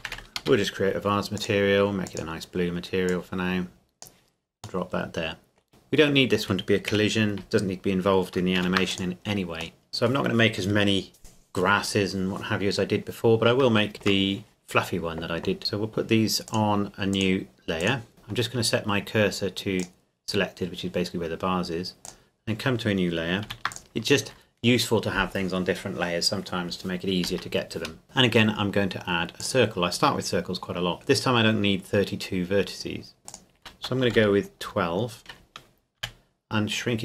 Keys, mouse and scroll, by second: 0.1 e, 0.4 Return, 1.4 click, 4.8 middle click, 5.7-6.9 scroll up 2, 6.9 KP_1, 8.6 ctrl+s, 8.9 click, 9.8 middle click, 11.2-11.5 scroll down 1, 13.9 shift+middle click, 15.6 click, 18.1 shift+s, 19.8 click, 23.5 ctrl+s, 23.7 click, 28.0 shift+a, 29.4-31.2 drag, 33.3 click, 34.0 KP_1, 34.1 KP_2, 34.7 KP_Enter, 36.0 s.